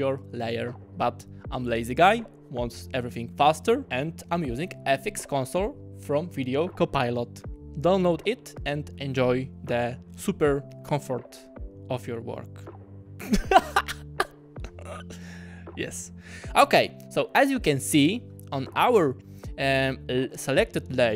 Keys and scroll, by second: 3.8 alt+super+z, 4.4 super+z, 18.6-19.4 typing.